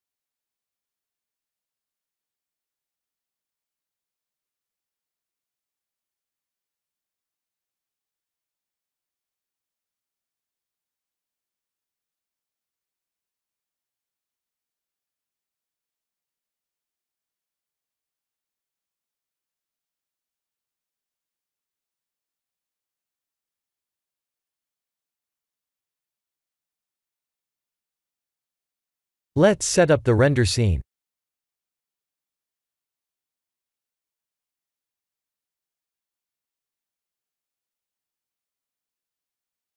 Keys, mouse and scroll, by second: 3.6 click, 8.3 click, 9.8 click, 10.8 1, 14.6 scroll up 3, 15.6 scroll up 2, 29.8 middle click, 32.8 middle click, 34.2 middle click, 35.0 KP_0, 36.3-36.7 scroll down 3.